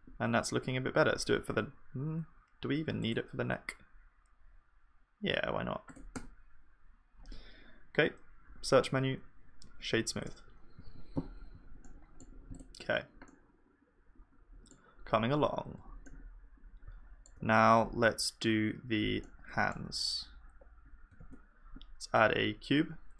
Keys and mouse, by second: 0.9 Tab, 1.4 ctrl+r, 6.2 Tab, 8.5 F3, 10.8 ctrl+s, 14.7 middle click, 15.2 KP_1, 16.1 middle click, 21.2 shift+a.